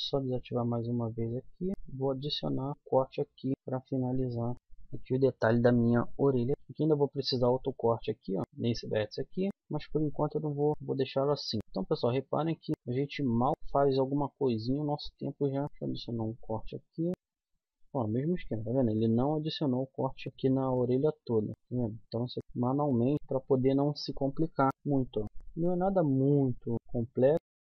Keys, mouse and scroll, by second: 0.3 middle click, 1.3 middle click, 1.7 k, 4.5 middle click, 5.1 middle click, 6.5 middle click, 6.8 middle click, 7.6-9.4 middle drag, 10.1 middle click, 10.4 click, 11.0 middle click, 11.6 click, 12.0 middle click, 12.5 middle click, 12.7 middle click, 13.0-15.5 drag, 14.0 right click, 15.5 middle click, 15.6 ctrl+r, 16.8-17.8 middle drag, 19.0 middle click, 20.2 middle click, 20.5-21.5 middle drag, 23.0 middle click, 23.3 click, 24.7 k, 25.7 k.